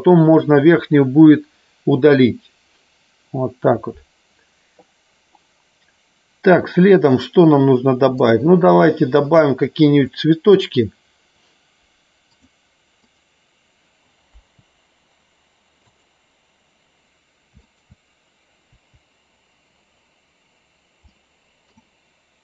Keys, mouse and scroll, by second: 10.0 middle click, 13.1 click, 14.3 Delete, 17.6 shift+click, 18.7 Delete, 21.1 middle click, 22.3 click.